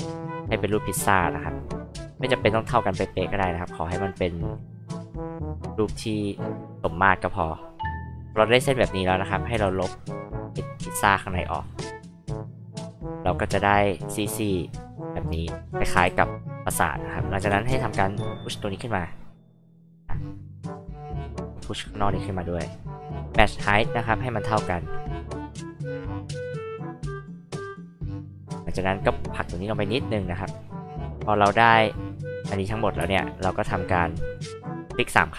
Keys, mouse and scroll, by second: 0.6 click, 3.0 click, 4.0 click, 5.7 click, 6.8 click, 9.5 e, 9.9-12.5 drag, 15.9 h, 16.1 click, 17.4 p, 18.0-20.2 drag, 21.2-23.6 drag, 24.7 click, 26.1-27.4 drag, 28.7-30.3 drag, 30.9 h, 31.3-31.9 drag, 32.4-32.7 drag, 33.0 space, 33.3 click, 33.5 click, 33.7 click, 33.8 click.